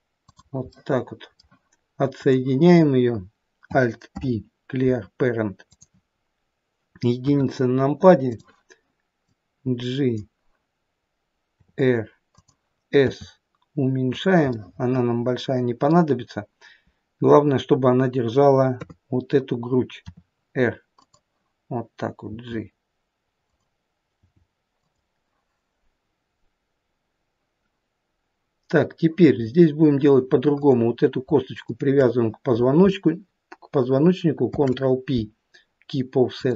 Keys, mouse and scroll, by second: 0.8 middle click, 2.2 click, 4.1 alt+p, 8.4 click, 8.4 KP_1, 9.3 click, 11.6 r, 13.1 s, 14.6 middle click, 15.5 middle click, 18.8 KP_3, 20.1 r, 22.3 g, 24.2 g, 29.4-30.6 scroll up 2, 30.6 click, 30.6-31.3 scroll up 2, 31.7 shift+click, 34.5 ctrl+p.